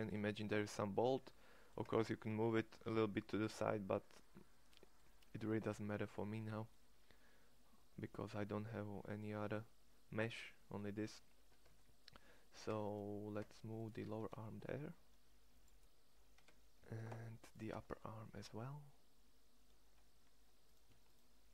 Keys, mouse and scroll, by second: 1.9 Tab, 5.3 Tab, 9.4 middle click, 11.6 Tab, 12.7 Tab, 13.3 Tab, 14.0 shift+s, 16.7 Tab, 17.6 Tab, 19.9 middle click.